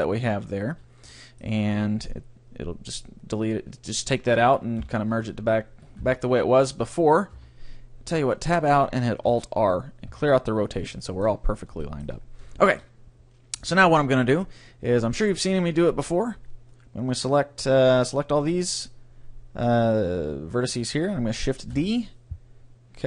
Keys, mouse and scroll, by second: 0.7 a, 1.1-3.1 middle drag, 4.0-6.0 right drag, 4.8 KP_3, 6.0 KP_Decimal, 7.3 Tab, 9.3 alt+r, 10.1 Tab, 11.0-12.3 middle drag, 13.6 a, 13.9 c, 15.5 b, 17.7 b, 21.7 shift+d.